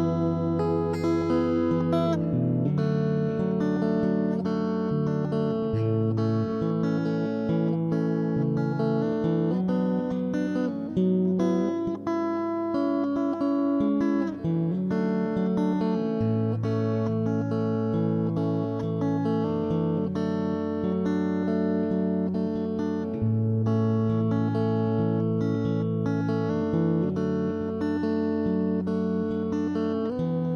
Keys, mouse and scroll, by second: 0.5 click, 1.8 ctrl+z, 2.2 right click, 2.7 shift+r, 3.0 middle click, 3.3 ctrl+z, 3.9 super+right click, 4.0 middle click, 4.3 ctrl+e, 4.4 middle click, 4.7 right click, 4.9 shift+r, 5.0 middle click, 5.8 right click, 6.3 middle click, 6.3 shift+r, 6.7 right click, 7.1 shift+r, 7.3 ctrl+Tab, 7.6-8.7 right drag, 9.1 super+right click, 9.4 middle click, 9.8 right click, 10.0 ctrl+z, 10.6 middle click, 11.0 right click, 11.2 middle click, 11.6 right click, 11.7 middle click, 11.9-14.1 right drag, 12.4 click, 13.4 click, 13.8 ctrl+z, 13.8 click, 14.1 middle click, 14.2-15.4 right drag, 14.5 click, 15.2 click, 15.4 middle click, 15.7 click, 15.8-17.0 middle drag, 17.0 right click, 17.4 click, 17.6 middle click, 17.8-20.1 right drag, 18.0 click, 18.6-19.7 drag, 20.2 ctrl+z, 20.3 right click, 20.6 click, 20.8 middle click, 20.9 click, 20.9-22.2 right drag, 21.2 click, 22.0 click, 22.2 middle click, 23.4 ctrl+s, 23.8 middle click, 24.1 middle click, 24.6 middle click, 25.8-28.3 middle drag, 25.9 scroll, 28.5 ctrl+e, 28.7 ctrl+r, 29.1 middle click, 29.7 ctrl+KP_3, 30.0 middle click, 30.5 middle click.